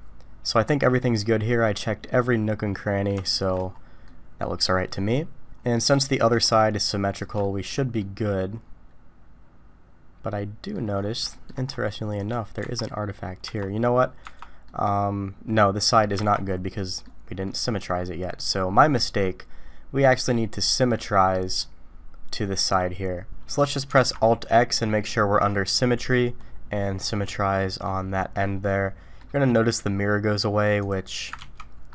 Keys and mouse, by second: 3.3 shift+middle click, 4.0-4.4 middle drag, 6.0 shift+middle click, 6.9 middle click, 7.4 shift+middle drag, 8.0-10.7 middle drag, 11.3 shift+middle click, 12.6 Tab, 13.4 Tab, 14.2 Tab, 14.6 middle click, 16.1 Tab, 16.8 middle drag, 17.5 middle drag, 18.8-20.2 middle drag, 20.9-21.3 middle drag, 23.9 alt+x, 27.2-27.8 drag, 27.8-29.2 middle drag, 30.9 click, 31.4 ctrl+z.